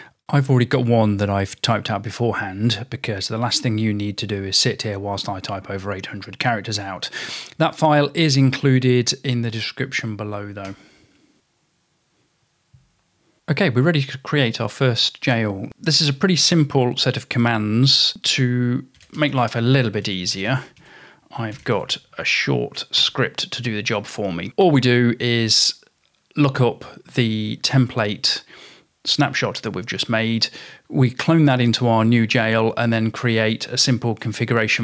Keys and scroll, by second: 0.4-1.5 typing, 6.7-10.4 typing, 10.7 Return, 13.1-13.9 typing, 18.8-23.6 typing.